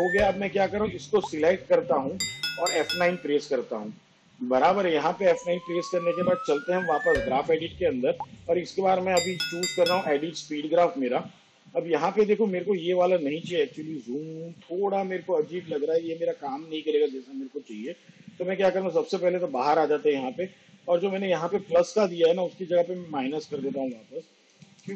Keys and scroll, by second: 2.7 F9, 23.9 -, 24.8 0.